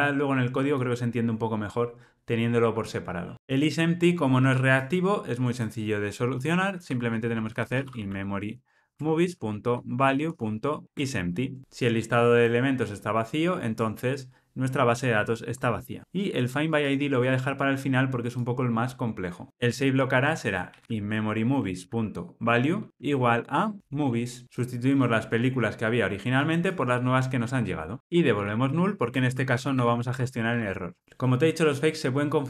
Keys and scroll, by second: 8.9 Return, 19.5 super+z, 21.6 Return, 24.4 Return, 30.5 Escape.